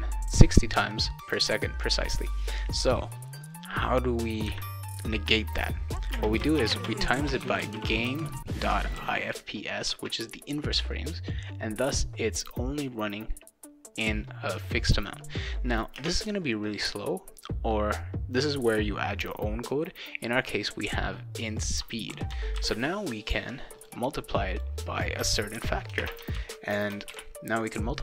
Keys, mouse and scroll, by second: 6.1-9.5 typing, 9.9 Return, 15.9 space, 21.4 click, 21.6 click, 22.6 ctrl+c, 23.8 click, 24.5 click, 25.5 shift+8, 26.0 space, 26.4 ctrl+v, 27.1 ctrl+s.